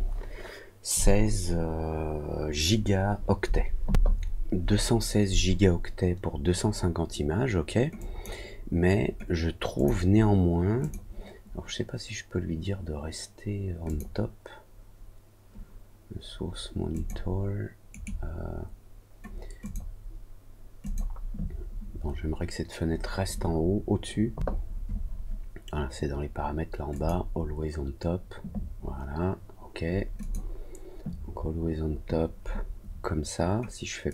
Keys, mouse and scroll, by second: 7.9 click, 9.7 click, 10.7 click, 34.0 click.